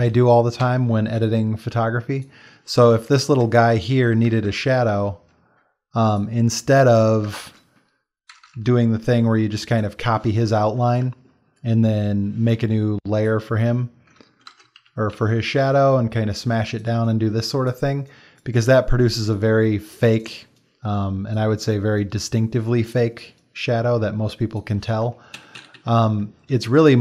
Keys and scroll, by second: 0.7 d, 1.0 x, 2.1 ctrl+space, 4.5 BackSpace, 7.4 alt+BackSpace, 8.5 ctrl+shift+[, 14.5 ctrl+BackSpace, 14.8 ctrl+d, 15.1 ctrl+t, 25.3 Escape.